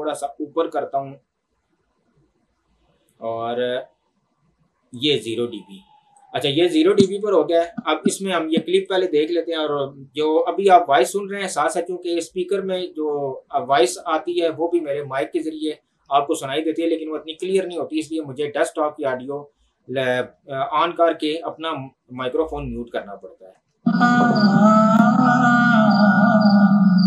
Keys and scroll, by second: 23.6 space.